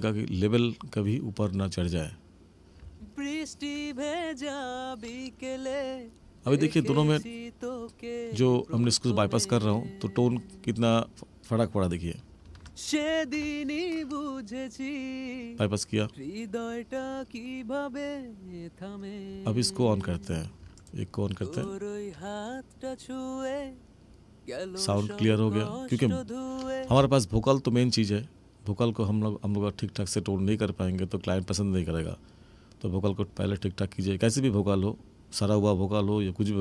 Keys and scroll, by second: 2.7 space, 26.8 space.